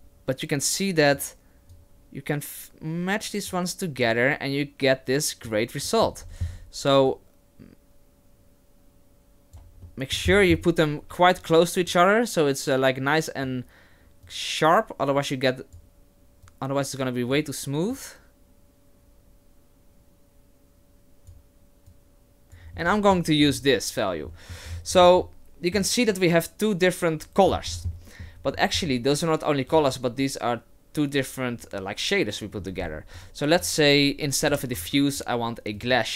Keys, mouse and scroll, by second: 1.7 click, 4.1 click, 5.9 middle click, 6.2-7.1 scroll up 8, 7.1 click, 9.8 middle click, 10.3-11.9 scroll up 7, 11.9 click, 11.9 scroll up 4, 14.2 click, 16.4 click, 17.9 click, 21.9 click, 22.4 click, 22.9-23.6 scroll down 7, 23.4-24.3 scroll up 3, 24.3 middle click, 24.7-25.5 scroll down 3, 25.2 middle click, 27.5-28.2 scroll down 7, 27.9 middle click, 28.4-29.7 scroll up 5, 29.7 click, 29.7-30.7 scroll up 3, 32.5 middle click, 32.6-34.5 scroll up 4, 33.2 click, 34.5 Delete, 34.8 shift+a.